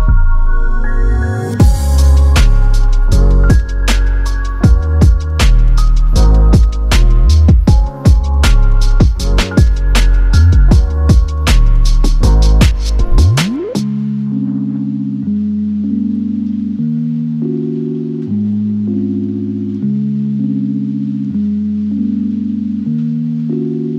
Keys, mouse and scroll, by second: 0.3 scroll down 3, 0.5 p, 0.6 middle click, 1.1 double click, 1.3 middle click, 1.6-2.1 scroll up 7, 2.1 typing, 3.3-6.2 typing, 5.0 Return, 5.8 Return, 7.1 double click, 7.9 double click, 8.1 space, 8.7 p, 11.0 scroll down 1, 11.1 p, 12.5-15.8 typing, 13.6 Return, 16.8 double click, 17.4 Delete, 17.9 Delete, 18.3 Delete, 19.1 double click, 19.2 double click, 19.3 double click, 19.4 right click, 20.1 middle click, 20.7 r, 22.0 double click, 22.2 right click, 22.9 double click, 23.4-23.9 typing.